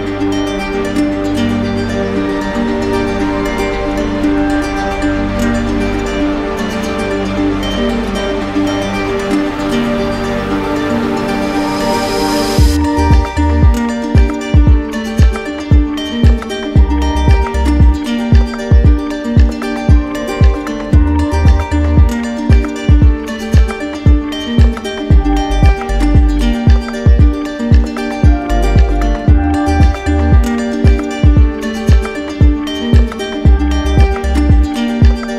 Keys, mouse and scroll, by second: 2.2 click, 2.5 shift+click, 3.4 shift+click, 3.6 alt+click, 4.7 alt+click, 5.5 alt+click, 6.8 alt+click, 16.1-17.2 drag, 17.9-18.9 drag, 19.6-20.6 drag, 22.9-23.9 drag, 24.2-26.2 drag, 27.4-28.5 right drag, 29.9-32.1 drag, 33.5 alt+right click, 34.4 right click.